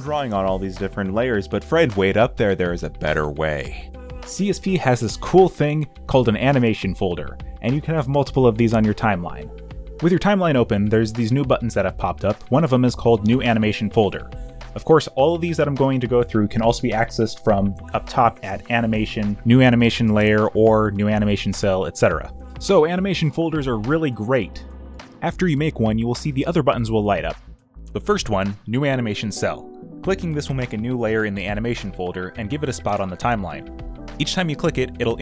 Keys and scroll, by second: 10.9 space.